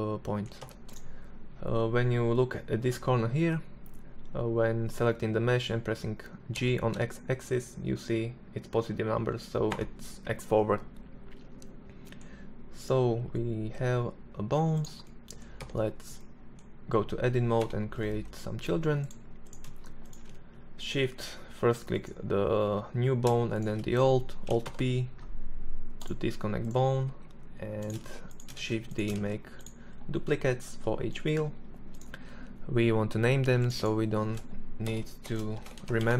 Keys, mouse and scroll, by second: 5.7 g, 9.7-12.0 middle drag, 12.0-12.9 right drag, 12.9 s, 14.8 Tab, 16.8 e, 22.7-23.8 right drag, 23.8 alt+p, 25.8 right click, 26.2 g, 27.1 shift+d, 27.7 shift+d, 28.3 shift+d, 31.1 right click, 35.1-36.1 middle drag.